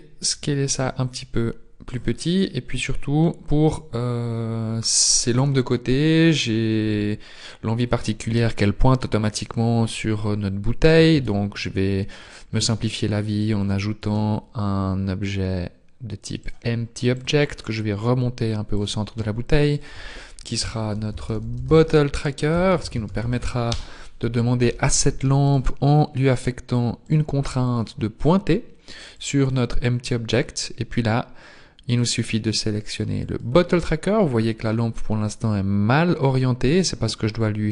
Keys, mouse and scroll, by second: 2.5 middle click, 3.2-5.7 scroll up 2, 11.1 shift+a, 14.1 s, 17.2 click, 23.7 t, 25.5 right click, 29.5 click, 33.4 click.